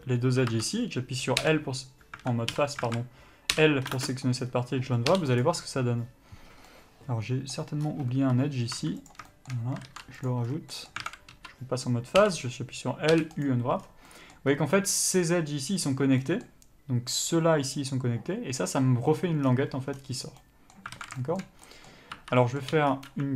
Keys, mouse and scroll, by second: 0.8 1, 1.7 l, 2.8 3, 3.1 alt+a, 3.8 l, 4.3 ctrl+space, 4.8-5.7 scroll up 1, 5.7 u, 6.9 middle click, 8.1-8.5 scroll up 1, 8.5 1, 9.0 2, 9.3 click, 9.5 shift+middle click, 10.5 ctrl+e, 10.8 scroll down 1, 11.0 middle click, 11.3 alt+a, 11.6 3, 12.5 l, 13.7 u, 16.5 middle click, 21.2 alt+a, 21.4 shift+middle click, 21.9-22.4 scroll up 1, 22.4 1, 22.7 middle click, 23.0 3, 23.1-23.3 scroll up 1.